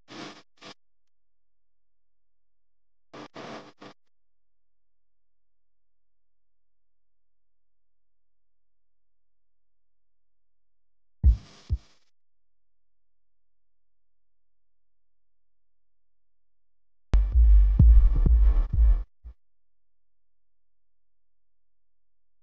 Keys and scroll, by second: 2.1 space, 2.6 super+space, 2.7 super+space, 11.6 space, 12.1 alt+super+space, 12.2 alt+super+space, 12.3 alt+super+space, 14.3 typing, 17.3-20.1 typing, 17.8 super+space, 17.9 super+space, 19.0 super+space, 19.1 super+space, 19.2 super+space, 19.3 super+space, 19.3 super+space.